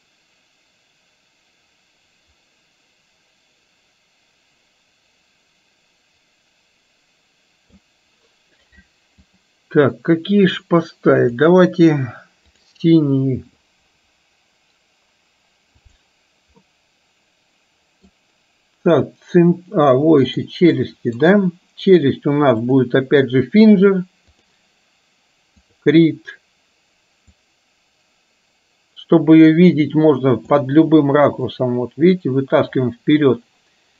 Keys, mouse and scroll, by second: 15.9 click, 16.6-18.1 middle drag, 20.4 click, 20.9 middle drag, 22.6-24.6 drag, 25.6 click, 27.4-30.6 drag, 31.5-32.8 middle drag.